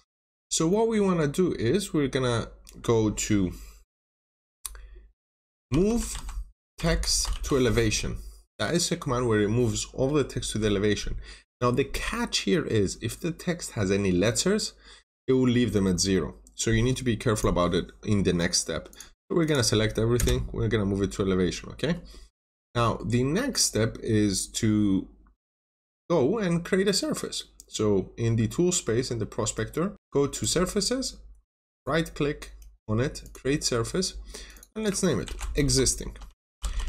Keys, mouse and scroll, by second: 0.0 middle click, 1.7-3.0 scroll down 1, 5.3-7.7 typing, 17.3 click, 18.1 scroll down 1, 18.8 click, 20.1 Return, 20.8 scroll up 1, 21.5 scroll down 1, 21.7 middle click, 22.1 scroll up 1, 22.6 middle click, 23.1-23.4 scroll down 1, 23.4 middle click, 25.4 scroll down 1, 25.5 middle click, 30.2 click, 31.6 right click, 33.1 click, 34.9-36.8 typing.